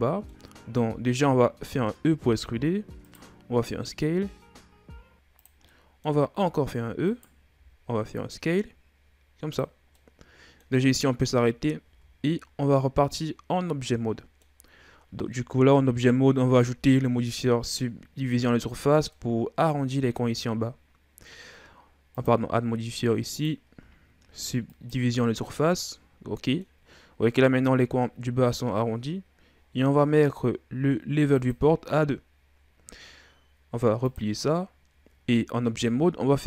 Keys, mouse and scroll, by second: 1.6 e, 3.6 s, 5.6 middle click, 6.3 e, 7.5 s, 10.0 middle click, 10.9-11.9 scroll up 1, 11.9 Tab, 12.2-13.1 scroll down 5, 13.1-14.7 middle drag, 14.7-15.3 scroll up 1, 15.3 shift+scroll up 1, 18.7-21.7 middle drag, 22.1 click, 23.4-25.9 drag, 25.9-26.9 middle drag, 26.9-29.9 scroll up 1, 31.3-35.7 drag, 35.7 w.